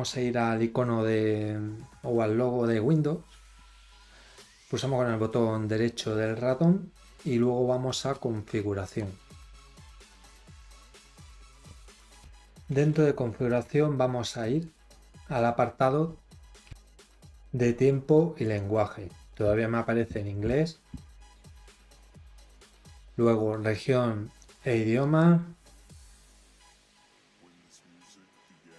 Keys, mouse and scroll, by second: 3.7 right click, 8.1 click, 14.5 click, 18.4 click, 24.9 click.